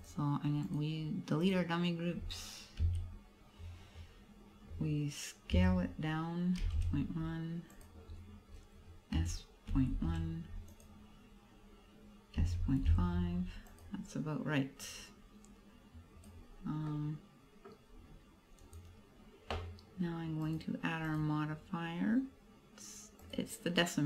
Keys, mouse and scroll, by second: 0.0 click, 0.7 right click, 2.9 a, 7.9 click, 8.2-8.6 scroll down 5, 9.0 scroll down 3, 9.3 s, 10.9 click, 11.5-11.9 scroll up 2, 12.5 s, 13.9 click, 14.9 click, 16.6-17.1 scroll up 2, 16.9 middle click, 17.9 scroll down 3, 18.7 right click, 20.5 click, 21.1 click.